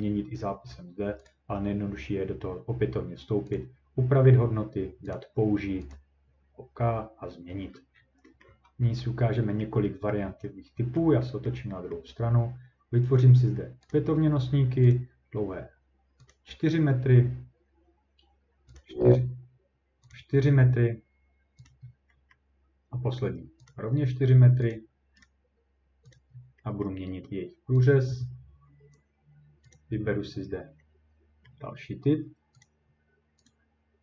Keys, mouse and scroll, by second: 3.6 click, 5.1 click, 5.9 click, 7.7-8.2 scroll down 5, 8.2 scroll, 8.4 scroll up 2, 9.6 scroll up 1, 10.2 scroll up 1, 11.0 ctrl+middle click, 11.1-13.0 scroll, 13.1-13.9 ctrl+scroll, 13.9 click, 14.2-14.9 ctrl+scroll, 14.9 click, 15.2 scroll, 15.8 ctrl+scroll, 16.3 click, 18.8 click, 20.1 click, 21.7 click, 21.8 scroll down 2, 22.3 scroll, 23.7 click, 24.7 click, 25.2 right click, 26.2 click, 26.3 scroll, 26.8 scroll down 1, 27.8 click, 29.7 click, 31.5 scroll down 1, 32.6 click, 33.5 click.